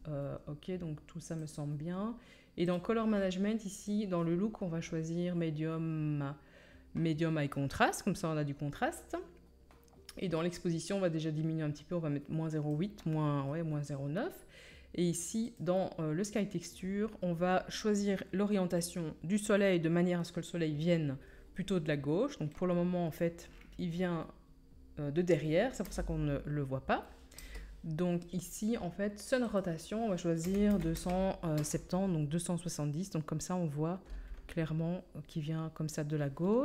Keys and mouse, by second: 15.6-29.5 drag, 25.8 KP_1, 27.3 KP_0, 29.5-36.6 middle drag.